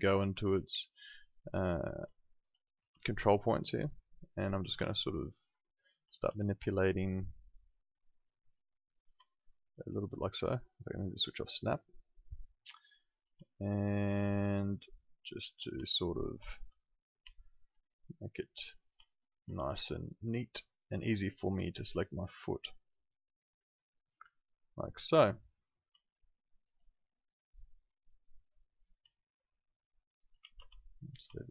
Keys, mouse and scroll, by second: 0.7 alt+click, 2.3 alt+click, 2.7 r, 3.8 click, 4.8 alt+click, 6.2 w, 7.4 click, 9.2 alt+click, 11.4 alt+click, 13.4 alt+click, 15.8 alt+click, 16.5 r, 17.3 alt+click, 19.0 alt+click, 19.5 w, 20.1 click, 21.0 alt+click, 25.9 alt+click, 29.0 alt+click, 30.3 ctrl+z, 30.7 alt+click, 31.3 alt+click.